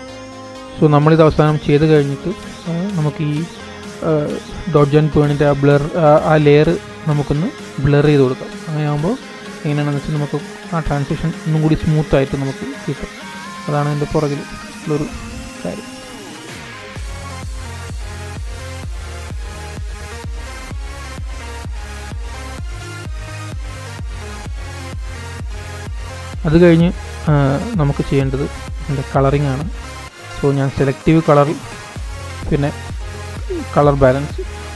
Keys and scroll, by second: 18.4 super+-, 20.1 super+=, 20.6 super+=.